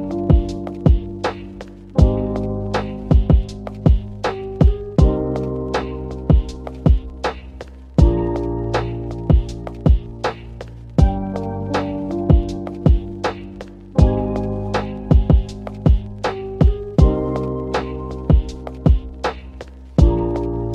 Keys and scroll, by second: 3.9 shift+space, 9.8 b, 19.5-20.4 typing.